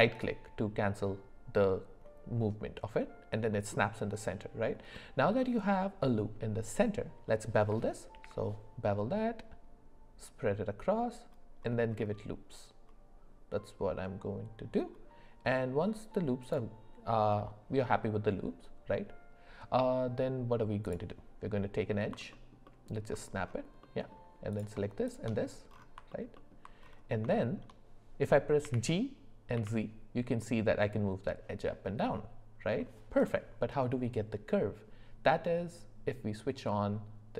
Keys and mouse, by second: 4.9-6.8 middle drag, 8.1 ctrl+b, 20.8 click, 22.3 alt+middle click, 22.6 alt+middle click, 23.8 middle click, 25.0 shift+click, 26.1 alt+middle click, 26.4 alt+middle click, 27.4 shift+middle click, 28.6 g.